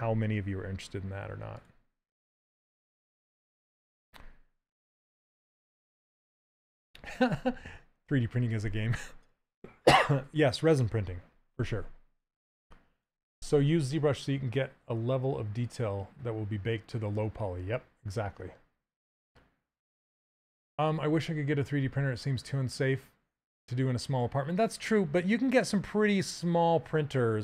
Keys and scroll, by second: 3.2 c, 12.5 s.